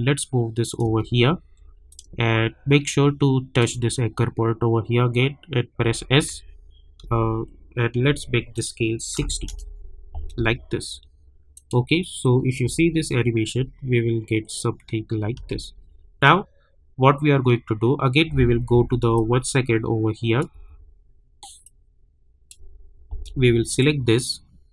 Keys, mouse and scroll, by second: 1.1-1.6 alt+scroll up 2, 2.2-3.7 shift+drag, 5.8 s, 6.2 s, 7.0 s, 8.5 click, 9.5 Return, 10.0-10.9 scroll down 1, 11.5 click, 12.6 space, 15.3 space, 18.7 =, 19.1-20.5 drag, 20.5 =, 21.6-23.6 drag.